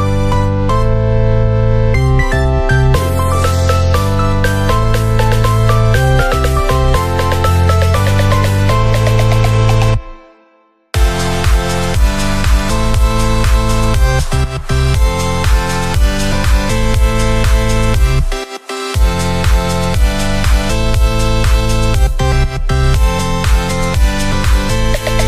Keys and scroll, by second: 3.4 ctrl+=, 22.9 ctrl+z.